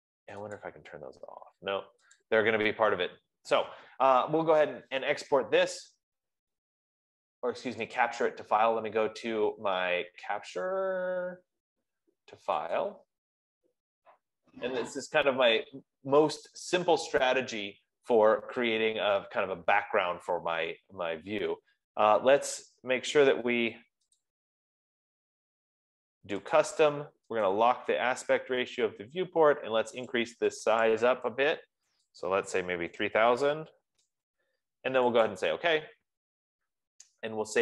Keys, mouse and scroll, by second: 0.9 click, 1.3 F15, 2.7 click, 6.6-7.7 drag, 8.5-10.9 drag, 13.4 click, 24.6 click, 27.0 click, 28.0 click, 30.4 click, 31.4 click, 32.4 click, 32.9-33.8 typing, 34.2 Tab, 35.8 click.